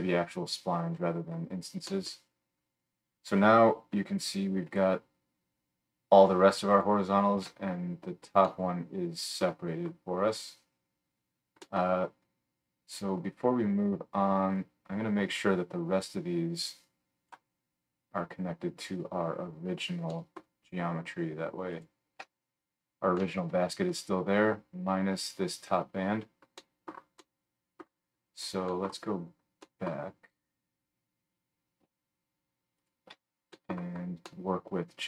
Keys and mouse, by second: 2.1-4.3 drag, 4.2 alt+shift+middle click, 4.2-12.7 alt+shift+right drag, 6.7 alt+shift+click, 6.7 alt+shift+middle click, 12.7-15.4 drag, 15.4-21.8 middle drag, 20.1 click, 20.1 right click, 20.3-21.3 drag, 20.3-21.3 right drag, 21.8 alt+shift+click, 22.4-26.8 right drag, 26.6 middle click, 26.8 middle click, 27.1 click, 27.3 middle click, 27.7 middle click, 28.0 right click, 28.3 middle click, 28.3-29.5 right drag, 29.5-35.0 drag, 32.8 alt+shift+middle click, 32.8 alt+shift+right click.